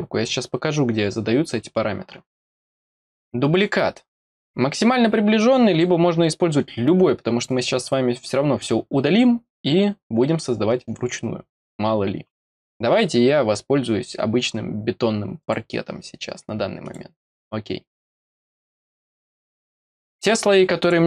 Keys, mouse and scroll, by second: 3.5 click, 15.3 click, 16.8 click, 20.7 click.